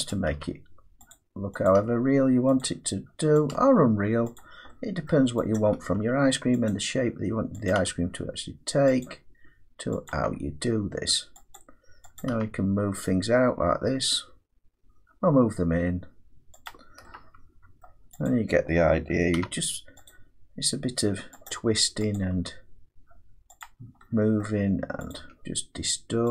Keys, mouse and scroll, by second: 0.1 click, 0.4 g, 1.1 click, 1.7 click, 1.8 g, 2.6 click, 3.5 click, 3.6 g, 4.4 click, 5.1 middle click, 5.6 click, 5.9 g, 6.7 click, 7.7 click, 7.8 g, 9.1 click, 10.1 click, 10.2 g, 11.6 click, 12.2 click, 12.4 g, 16.7 click, 17.9 middle click, 18.3 click, 19.4 g, 21.5 click, 22.2 click, 22.4 g, 23.6 click, 24.4 middle click, 25.1 click, 25.2 g.